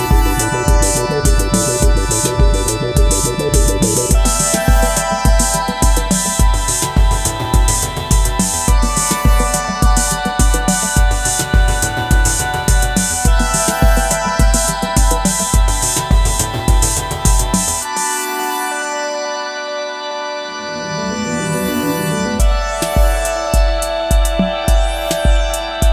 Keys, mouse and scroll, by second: 17.3 ctrl+t, 18.6 alt+shift+click, 22.2 alt+shift+click, 25.1 alt+shift+click.